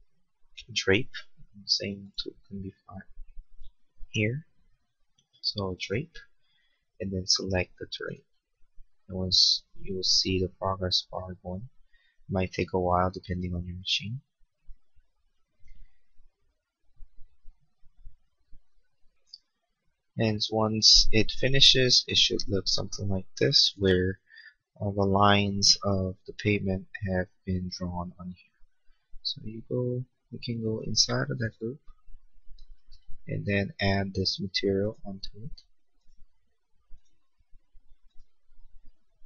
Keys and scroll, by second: 25.0 space, 32.8 b.